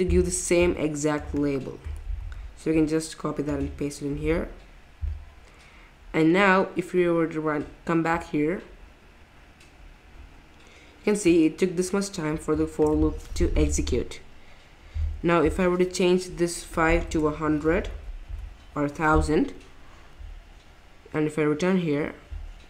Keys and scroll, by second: 2.2 super+c, 4.2 super+v, 17.0-18.3 typing, 19.7 typing.